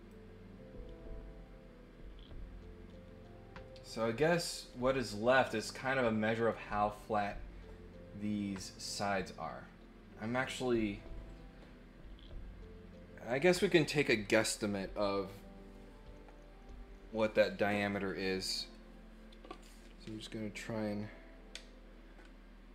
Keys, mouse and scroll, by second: 0.1-5.3 drag.